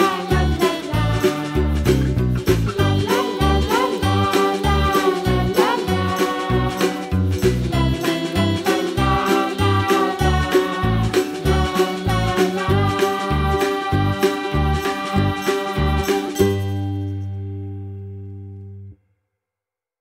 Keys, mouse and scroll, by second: 0.0 click, 0.2-1.4 right drag, 1.7 r, 2.4-3.7 middle drag, 5.5 scroll up 2, 5.7-6.4 middle drag, 6.4 click, 6.6-7.4 right drag, 7.4 click, 7.6 scroll down 2, 7.7-8.1 middle drag, 8.1-8.7 scroll up 1, 8.7-9.3 middle drag, 9.3 shift+a, 12.1 g, 13.7 KP_Decimal, 14.1-14.4 scroll down 2, 14.4-15.0 middle drag, 15.0 s, 16.5 s, 17.9-18.6 middle drag, 18.6 s, 19.8 s.